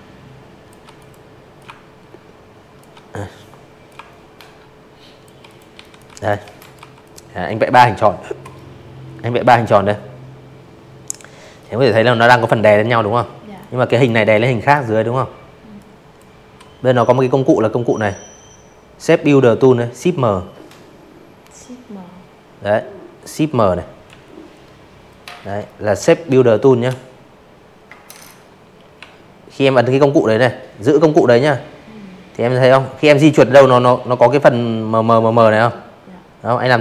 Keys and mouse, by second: 0.8-2.2 shift+drag, 2.4 click, 2.4-4.2 typing, 2.8 click, 3.1 click, 3.6 click, 4.0 click, 4.4 click, 6.5 click, 8.5 click, 10.5 click, 10.9 click, 11.3 click, 11.6 click, 12.7 click, 21.0 m, 25.9 m, 34.3-36.8 drag.